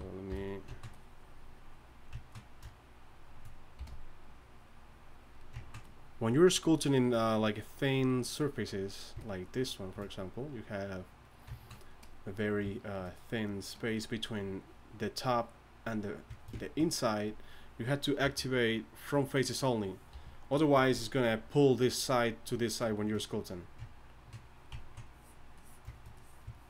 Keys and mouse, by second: 0.3 f, 0.9-2.4 drag, 3.8 f, 10.4 click, 14.2-15.4 drag, 15.4-16.1 drag, 18.2 click, 18.2 t, 20.1 t, 20.3 click, 23.6 t, 24.8-25.9 drag.